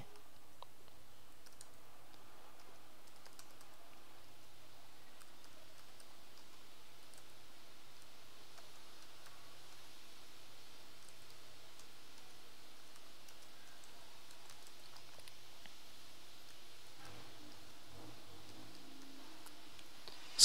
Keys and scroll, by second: 0.1 shift+Return, 1.2-9.7 typing, 2.6 shift+Return, 4.3 shift+Return, 10.8-19.5 typing.